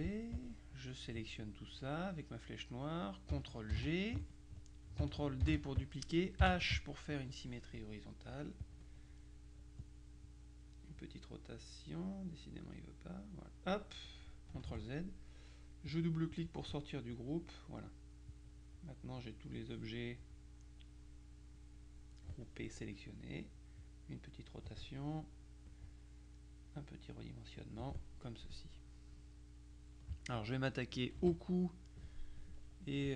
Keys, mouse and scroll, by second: 0.0 F1, 0.1 click, 3.8 ctrl+g, 5.5 ctrl+d, 6.5 h, 7.2-9.2 drag, 9.9-10.9 drag, 11.1 click, 11.8 click, 12.4 click, 13.1-14.3 drag, 14.7 ctrl+z, 16.0-17.1 drag, 17.2 click, 18.4 click, 20.7 click, 23.9 click, 25.8 click, 26.8-28.4 drag, 28.3 middle click, 29.4 middle click, 31.3 KP_Subtract, 31.8 middle click.